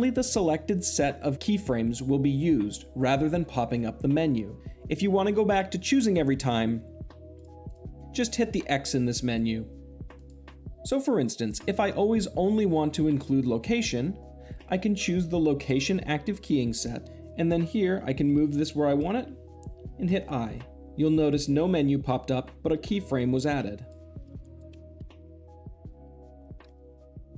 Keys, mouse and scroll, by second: 7.3 click, 10.0-11.8 drag, 13.6-14.6 drag, 18.0 g, 18.7 click, 19.9 i, 23.0-24.1 drag, 24.4 g, 24.5 click, 24.7 i, 25.0 shift+Left, 25.3 click, 25.8 click, 26.3 click.